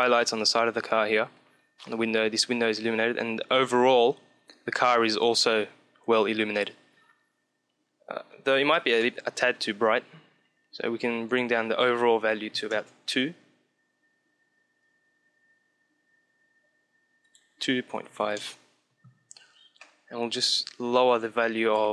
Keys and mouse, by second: 8.0-10.4 middle drag, 10.8-13.0 drag, 17.1-18.9 drag, 19.6 middle click, 20.5-21.9 drag.